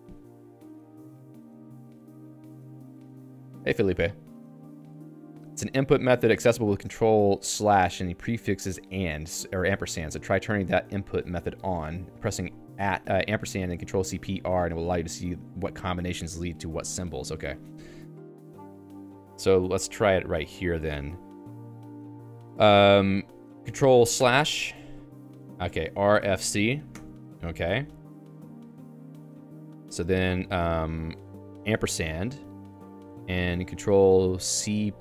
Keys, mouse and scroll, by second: 13.8 Escape, 17.5 click, 17.6 Escape, 18.1 ctrl+alt+j, 19.4 Return, 19.8 j, 20.2 o, 20.8 Return, 24.2 ctrl+\, 25.7-29.9 typing.